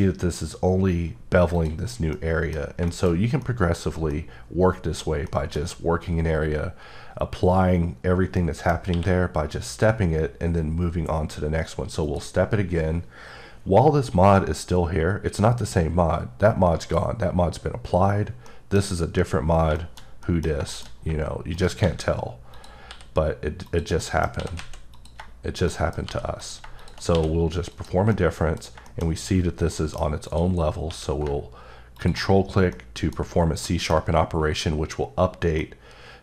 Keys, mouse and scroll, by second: 1.5 click, 1.8 scroll, 2.1 middle click, 2.8 shift+middle click, 3.1 scroll up 1, 3.4 middle click, 4.1 middle click, 5.0 scroll down 1, 8.4 middle click, 8.9 q, 12.0 click, 18.4 click, 18.5 middle click, 18.8 scroll up 1, 19.8 middle click, 20.1 scroll up 1, 20.2 middle click, 20.7 shift+middle click, 20.8 shift+scroll up 3, 21.5 shift+right click, 21.8 shift+a, 22.5 click, 22.9 s, 23.6 click, 24.0 middle click, 24.4 s, 24.9 click, 25.7 middle click, 26.1 g, 26.4 click, 27.1 q, 27.7 click, 28.1 middle click, 29.0 shift+scroll up 2, 30.3 click, 30.9 q, 31.9 ctrl+click, 32.7 middle click.